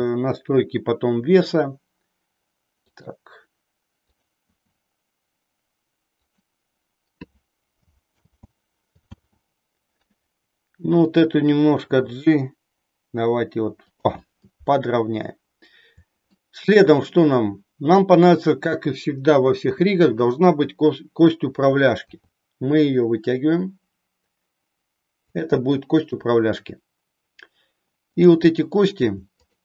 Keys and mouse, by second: 2.9 click, 4.2 click, 5.1 e, 8.2 ctrl+z, 9.2 ctrl+z, 11.1 click, 12.1 g, 13.9 click, 16.3 shift+middle click, 18.1 click, 22.1 e, 25.4 click, 25.9 click, 28.1 click, 29.4 shift+click.